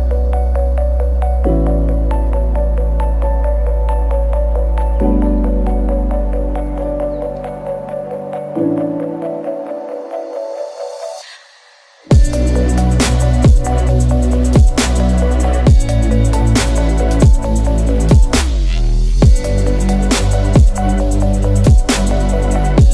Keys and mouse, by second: 11.4 Delete, 11.4 middle click, 12.1-13.5 middle drag, 13.6 middle click, 13.9 middle click, 21.2 middle click, 22.1-22.9 middle drag.